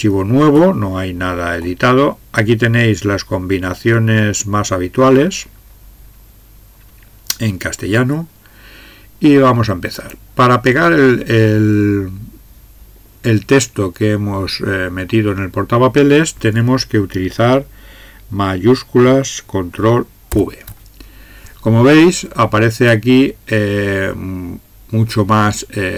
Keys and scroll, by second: 20.3 ctrl+v.